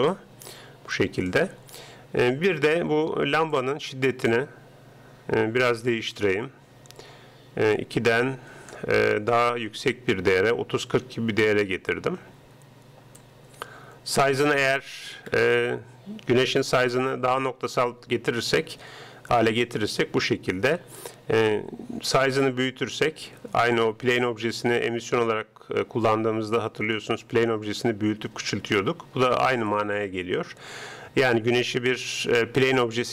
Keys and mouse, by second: 1.0-2.7 middle drag, 3.6-5.3 drag, 5.7-7.4 drag, 7.8-9.6 drag, 13.2-15.0 drag, 15.4-18.3 middle drag, 21.0-22.7 drag, 29.8-31.3 drag.